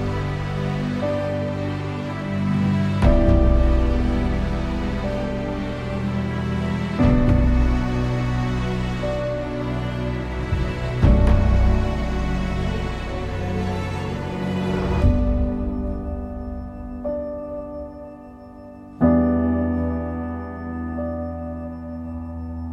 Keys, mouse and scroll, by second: 0.1 n, 1.4 click, 2.2-2.6 scroll down 11, 3.2-4.4 scroll down 3, 4.4 click, 4.9 n, 5.6-8.3 middle drag, 8.3-8.8 scroll up 1, 8.8-11.8 middle drag, 11.8 click, 12.5 scroll up 1, 17.5-22.7 drag.